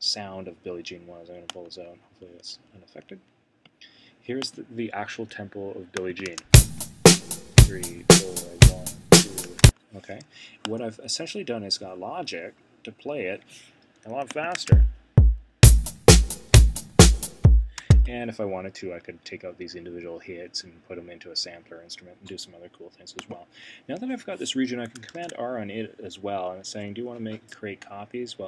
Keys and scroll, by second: 25.1 super+r.